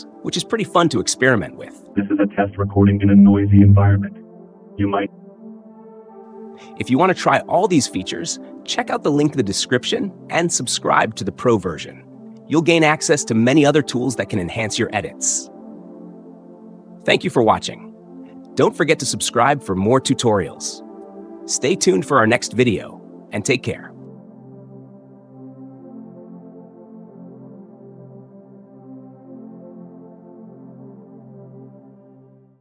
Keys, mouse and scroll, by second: 5.0 space, 6.8-7.8 drag, 10.8 click, 15.9 click, 17.8 click.